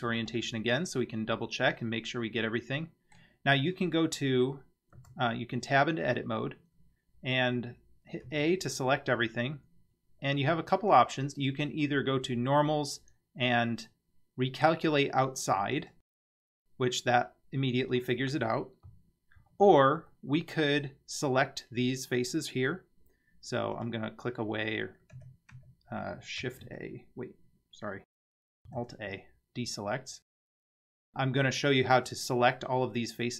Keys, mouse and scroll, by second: 1.0-3.2 middle drag, 5.0 Tab, 8.3 a, 10.9-15.9 drag, 19.4 ctrl+z, 20.1-20.5 middle drag, 23.7 click, 25.1 a, 25.5 a, 26.6 shift+a, 28.8 alt+a, 31.3 scroll up 2.